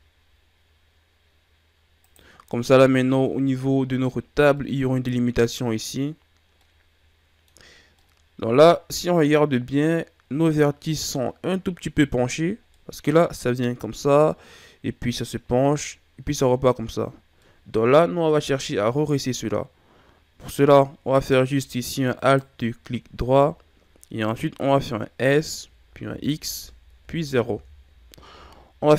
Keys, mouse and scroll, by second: 2.3 scroll down 1, 2.4-3.6 middle drag, 3.6-4.5 scroll up 1, 4.5-10.6 middle drag, 10.6-11.1 scroll up 1, 11.1-15.7 middle drag, 17.4-20.4 middle drag, 22.1 alt+right click, 25.2 s.